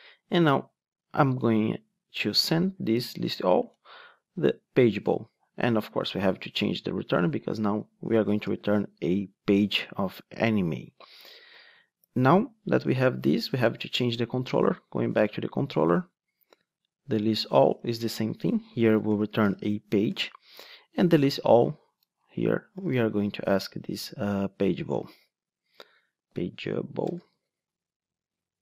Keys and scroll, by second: 9.4 Return, 20.2 Return, 25.3 Return.